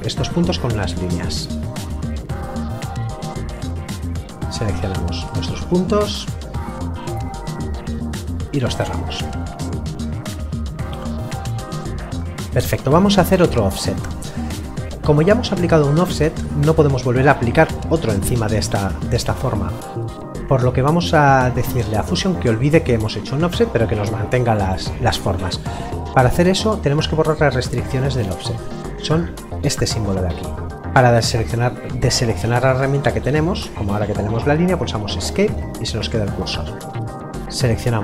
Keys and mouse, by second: 0.7 click, 3.9 click, 30.8 Delete, 32.6 click, 35.2 Escape.